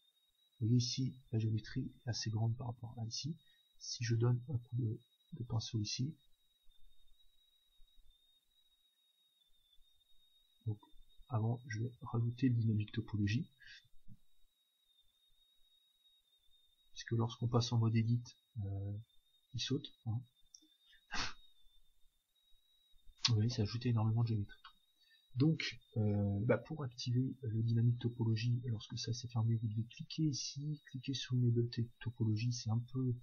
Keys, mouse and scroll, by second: 0.8 Tab, 2.8 Tab, 3.2-5.1 drag, 6.4-10.1 middle drag, 6.7-10.1 drag, 10.8-14.4 middle drag, 12.0-14.6 drag, 18.2 Tab, 19.0 Tab, 20.6 Tab, 23.3 Tab, 24.1-26.5 middle drag, 24.1-26.1 scroll up 1, 26.1-26.5 scroll up 1, 27.3-31.4 middle drag, 27.3-28.3 scroll up 1, 28.3-31.7 drag, 32.7-33.2 drag.